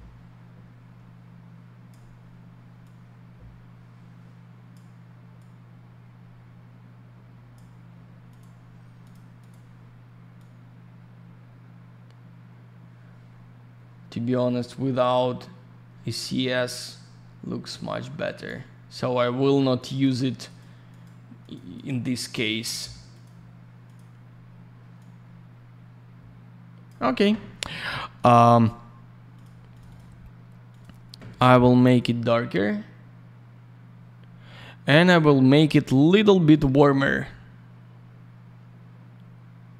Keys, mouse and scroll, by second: 2.8 click, 5.3 click, 8.3 click, 8.4 click, 9.0 click, 9.1 click, 9.4 click, 9.4 click, 10.3 click, 19.7 click, 20.4 click, 20.5 click, 20.8 click, 21.0 double click, 21.4 click, 21.5 click, 21.7 click, 21.8 double click, 22.2 click, 22.3 click, 22.6 click, 22.7 double click, 23.1 click, 23.2 click, 23.8 click, 23.9 click, 24.9 click, 28.5 click, 28.6 click, 29.3 click, 29.4 click, 29.7 click, 29.7 click, 29.8 click, 29.9 double click, 30.7 click, 30.7 click, 31.9 click, 36.0 click, 37.0 click.